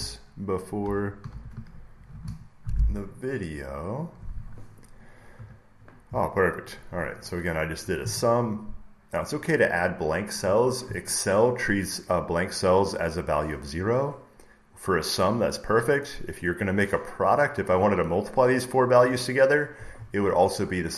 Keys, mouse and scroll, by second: 0.0-2.4 typing, 4.2-6.3 drag, 5.2 Return, 6.6 click.